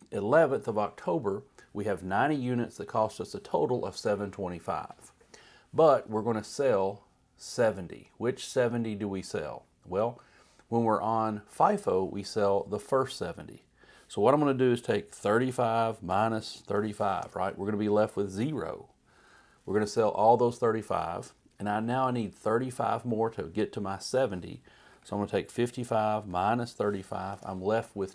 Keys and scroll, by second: 14.7-17.4 typing, 24.9-27.3 typing.